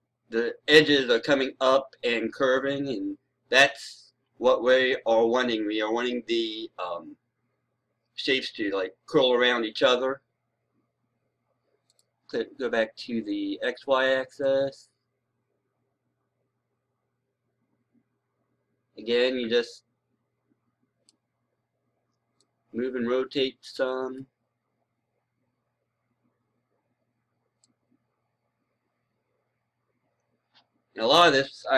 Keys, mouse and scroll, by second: 14.3-21.4 right drag, 22.2-24.4 drag, 25.8 scroll down 1, 27.5-31.7 right drag.